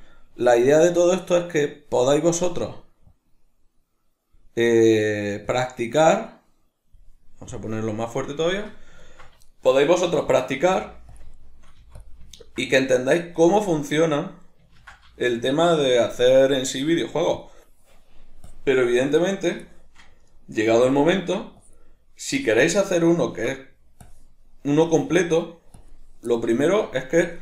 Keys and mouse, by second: 3.1-8.5 drag, 8.5-11.2 shift+middle drag, 10.7 f, 11.2 click, 11.3-12.1 shift+middle drag, 11.8 f, 12.1 click, 12.3-13.6 ctrl+middle drag, 13.6-15.2 drag, 14.8 ctrl+z, 15.2-17.4 shift+middle drag, 17.4-19.7 drag, 19.7-20.9 shift+middle drag, 20.7 f, 20.9 click, 21.1-21.6 ctrl+middle drag, 21.6-22.9 drag, 22.9-24.1 middle drag, 24.1-26.4 drag, 26.4-27.2 shift+middle drag, 27.2-27.4 drag.